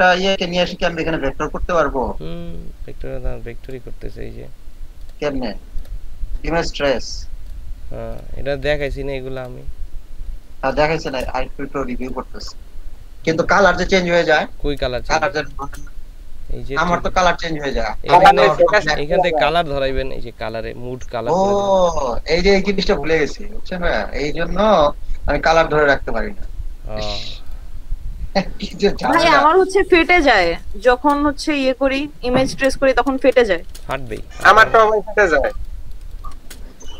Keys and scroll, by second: 10.7 space, 14.9 space, 28.9 ctrl+space, 30.1 ctrl+space, 32.5 ctrl+g, 33.2 ctrl+space, 33.9 ctrl+space, 35.4-36.0 typing.